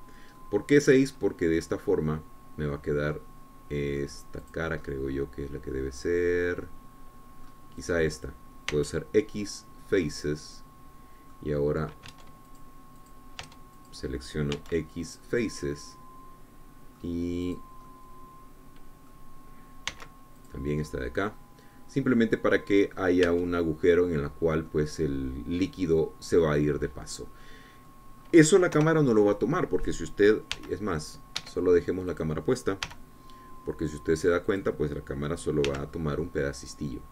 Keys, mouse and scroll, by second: 2.0-5.8 middle drag, 5.8 click, 6.5-9.3 middle drag, 9.3-10.3 drag, 10.3 x, 11.2 click, 11.7-13.8 middle drag, 13.8 Tab, 14.1 click, 15.1 Tab, 15.6 click, 16.2 x, 16.7 click, 17.3-19.1 middle drag, 19.1-20.9 drag, 21.6 x, 22.0 click, 22.5-24.9 middle drag, 25.0 Tab, 26.0-26.3 scroll down 1, 26.3-27.8 middle drag, 27.8 click, 28.7 middle click, 29.1 click, 30.4 KP_0, 32.2 g, 33.1 Escape, 33.9 click, 34.5 g, 36.2 click.